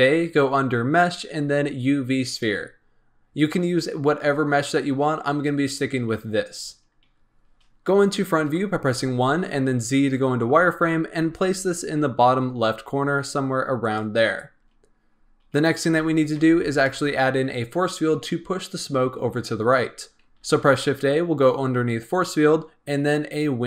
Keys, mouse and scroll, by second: 6.5-8.4 scroll up 2, 8.4 KP_1, 9.6 z, 10.9 scroll up 1, 11.1 g, 14.4-15.1 scroll down 2, 15.1-15.4 scroll up 2, 15.8 s, 16.3 g, 20.3 shift+a.